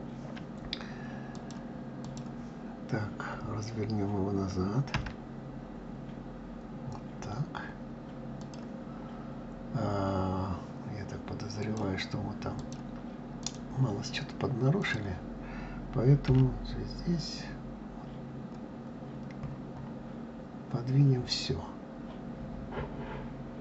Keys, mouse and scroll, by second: 1.1-4.1 drag, 11.4 click, 12.4-14.7 drag, 16.1 g.